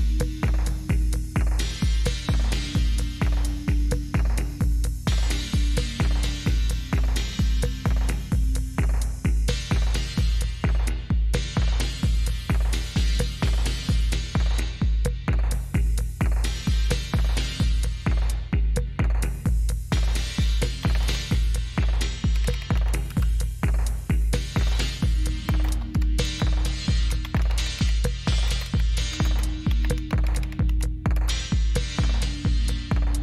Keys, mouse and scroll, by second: 0.0-0.7 scroll down 2, 0.7-2.5 scroll down 1, 2.5 click, 5.1 click, 10.1-11.7 scroll down 3, 11.7-13.1 scroll down 2, 13.1-14.0 scroll down 1, 14.0-14.6 scroll down 1, 14.6-15.6 scroll up 2, 16.5 click, 20.6-23.2 typing, 25.2-31.1 typing.